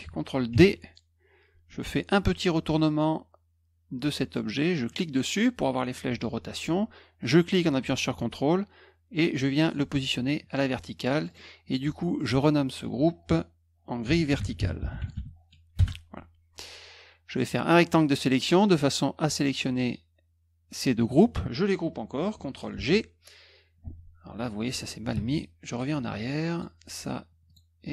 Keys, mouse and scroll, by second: 0.5 ctrl+d, 4.9 click, 7.2-9.7 drag, 11.1 click, 11.2 click, 11.6 click, 12.1 click, 13.8-15.6 typing, 15.7 Return, 17.4-18.2 drag, 22.7 ctrl+g, 25.1 ctrl+z, 25.7 click, 26.5 click, 27.4 shift+click.